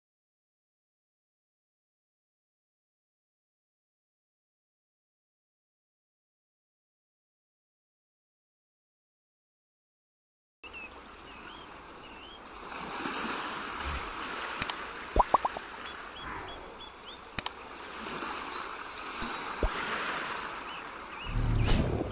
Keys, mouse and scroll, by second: 0.8 z, 4.6 Tab, 5.1 Tab, 5.6 Tab, 7.9 click, 11.6 g, 15.6 middle click, 17.2 click, 17.8 middle click, 20.6 Tab, 21.3 middle click.